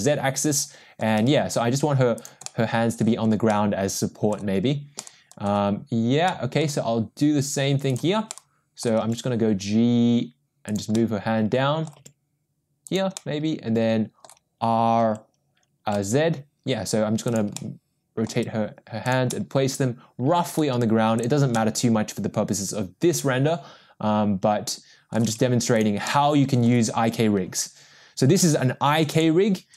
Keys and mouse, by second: 1.4 g, 2.4-3.0 middle drag, 3.5-4.3 middle drag, 5.0-5.4 middle drag, 6.3-6.6 middle drag, 7.9 click, 8.3-8.8 middle drag, 9.4 g, 10.9-11.9 middle drag, 13.1 g, 13.1-14.2 middle drag, 15.0 r, 17.5 middle click, 18.3 g, 19.3-20.5 middle drag, 21.1 g, 21.5-25.1 middle drag, 25.5 g, 26.0-26.6 middle drag.